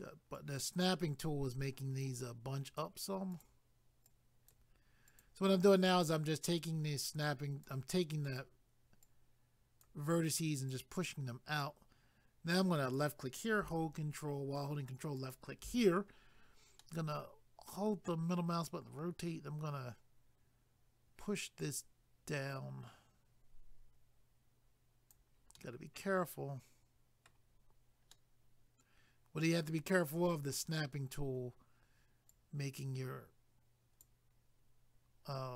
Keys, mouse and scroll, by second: 0.3 click, 2.6 click, 3.3 click, 5.1 click, 6.0 click, 7.3 click, 8.3 click, 9.1 click, 10.7 click, 12.8 click, 15.2 ctrl+click, 16.1-16.7 scroll down 1, 16.8 middle click, 21.6 click, 25.6 middle click, 28.1 middle click, 32.3 click.